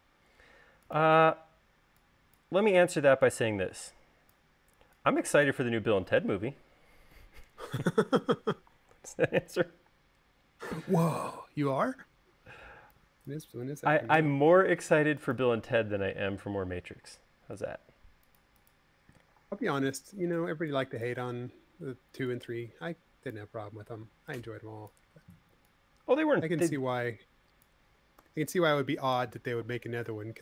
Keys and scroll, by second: 9.7 u, 11.6 u, 16.6 space, 17.3 Escape, 19.9 v, 28.4 u.